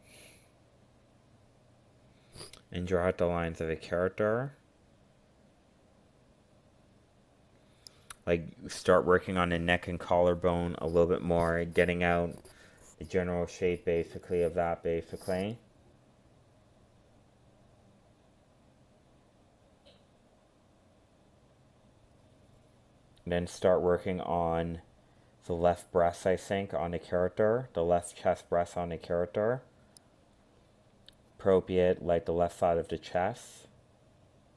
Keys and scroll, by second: 14.2 ctrl+z, 17.3 ctrl+z, 33.4 ctrl+z.